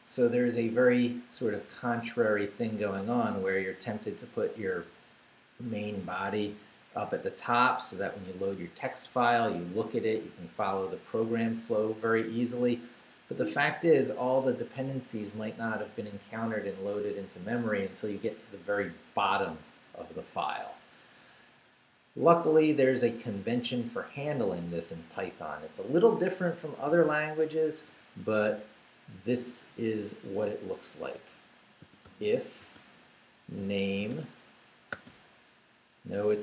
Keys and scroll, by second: 3.8 Down, 5.4 Up, 6.4 Down, 7.7 Down, 12.5 Down, 26.9-27.9 typing, 28.5 Return, 31.6-34.9 typing, 36.0 BackSpace.